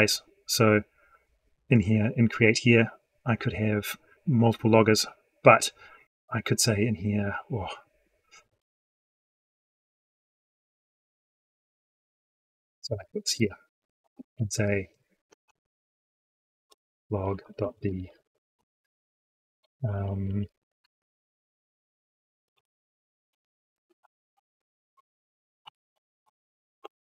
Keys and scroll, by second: 12.2 ctrl+x, 13.2 ctrl+v.